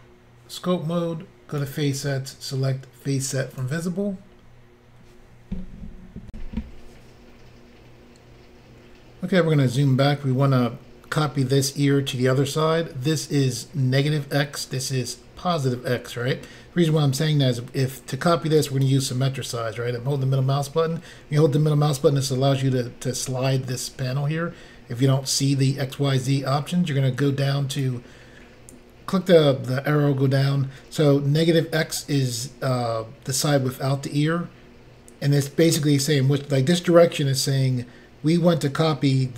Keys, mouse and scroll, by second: 1.5 click, 1.6 click, 3.5 click, 3.6 click, 6.3 Insert, 9.3-10.5 scroll down 3, 18.6 middle click, 27.8 click, 27.8 click.